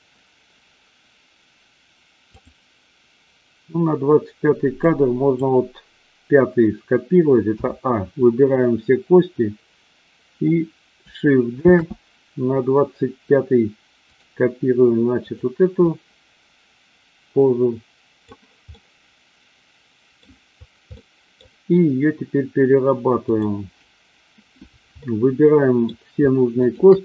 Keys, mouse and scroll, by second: 2.3 click, 4.8-5.4 drag, 7.4 a, 11.7 shift+d, 15.1 click, 15.9-18.3 drag, 18.8-20.3 middle drag, 20.9-21.4 middle drag, 23.3 click, 24.9-25.9 middle drag.